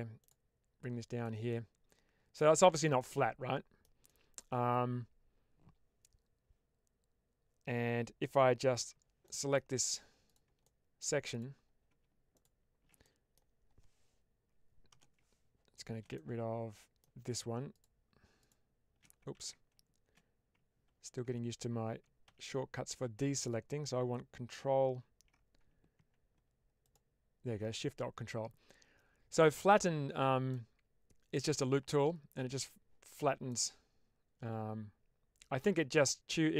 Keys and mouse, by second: 0.7 click, 1.5 middle click, 3.0 middle click, 4.1 shift+middle click, 8.7 3, 9.2 middle click, 10.2 click, 10.6 middle click, 12.2 ctrl+shift+click, 13.0 middle click, 16.0 middle click, 17.6 shift+click, 18.3 ctrl+shift+click, 19.2 ctrl+z, 22.2 ctrl+z, 22.9 ctrl+z, 28.2-29.5 middle drag, 30.4 middle click, 33.4-35.5 middle drag.